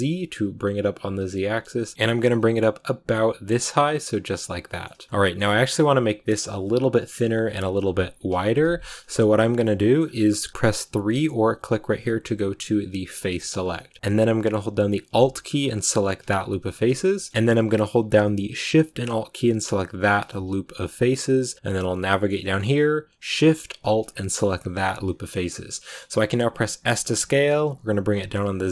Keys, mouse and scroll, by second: 4.9 shift+middle click, 5.1-8.4 scroll up 3, 5.1 shift+middle click, 8.5-8.8 scroll up 1, 8.8 scroll down 1, 8.9-13.5 shift+middle drag, 13.5-14.0 scroll up 3, 13.6 middle click, 14.0 a, 16.5 scroll down 1, 16.7 shift+middle click, 17.3-19.9 scroll up 1, 19.9 alt+shift+right click, 20.7-21.1 scroll down 1, 21.1-24.8 middle drag, 24.8 scroll down 1, 24.9-26.7 middle drag, 26.7 s.